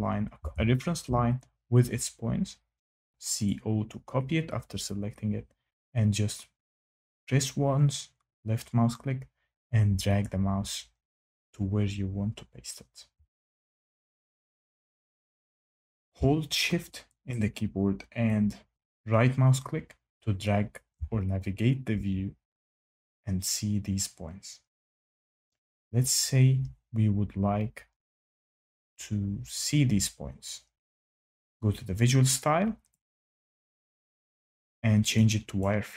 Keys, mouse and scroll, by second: 0.3-1.0 typing, 3.4 click, 10.2 click, 12.9 Escape, 20.6 shift+right click, 33.0 click, 35.5 click.